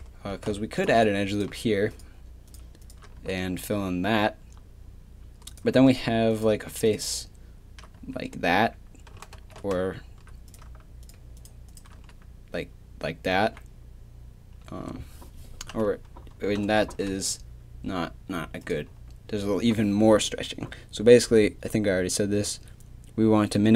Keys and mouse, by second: 0.3 ctrl+r, 3.2 f, 3.6 a, 8.0 f, 9.3 ctrl+z, 12.0 f, 13.3 a, 16.8 ctrl+r.